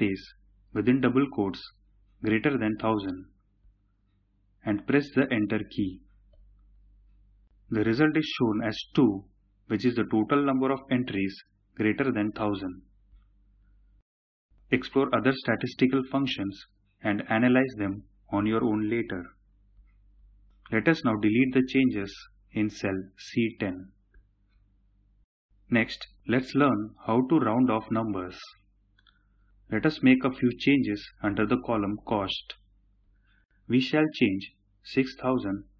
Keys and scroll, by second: 5.0 Return.